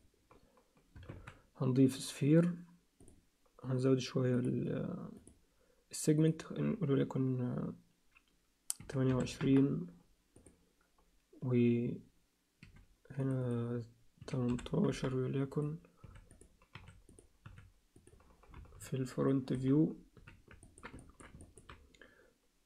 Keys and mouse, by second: 1.1 shift+a, 5.1 click, 6.2-9.6 drag, 10.3-15.1 drag, 15.6 click, 16.0 s, 16.7 s, 17.4 s, 18.5 KP_3, 20.1 z, 20.6 ctrl+middle click, 21.0 alt+shift+middle click, 21.4 ctrl+alt+click.